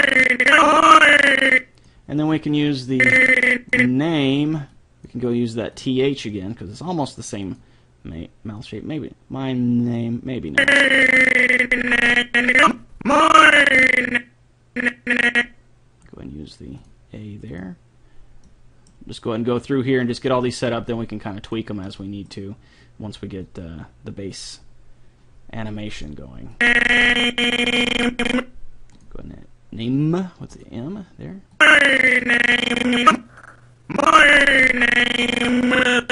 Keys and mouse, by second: 0.0-1.3 drag, 2.9-4.6 drag, 4.8-9.0 drag, 10.5-12.2 drag, 16.8-19.3 drag, 20.9-22.4 drag, 26.6-28.2 drag, 28.9-30.6 drag, 32.8 click.